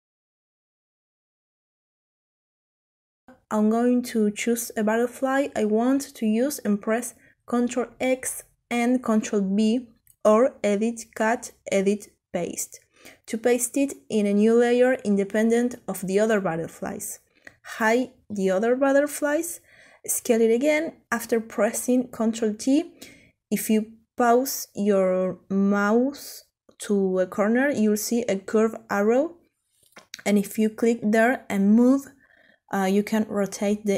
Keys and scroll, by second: 6.8 ctrl+x, 7.6 ctrl+v, 18.8 ctrl+t.